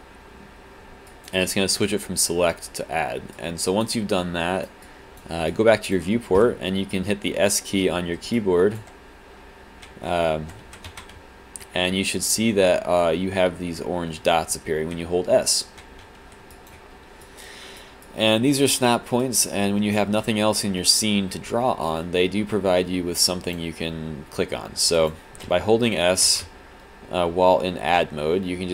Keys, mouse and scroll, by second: 1.1 alt+click, 3.4 alt+click, 4.2 right click, 4.8 click, 5.5 click, 6.7 s, 7.9 s, 8.3 click, 9.6 s, 10.2 alt+s, 10.2 middle click, 11.2 s, 11.9 s, 12.6 s, 13.4 s, 14.5 s, 15.3 s, 16.0 s, 16.5 alt+click, 17.2 right click, 18.0 click, 18.7 right click, 19.2 click, 21.9 alt+click, 25.0 alt+click, 25.5 s, 26.4 s.